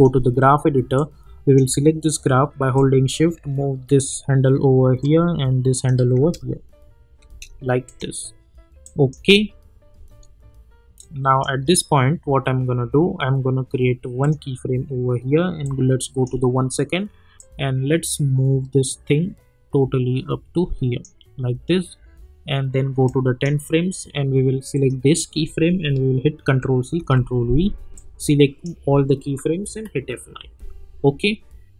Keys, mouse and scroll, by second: 5.0 click, 6.2 space, 7.8 click, 9.2 space, 11.0-13.8 drag, 14.2-24.7 drag, 26.4 ctrl+c, 26.9 ctrl+v, 27.9-29.7 drag, 29.7 F9.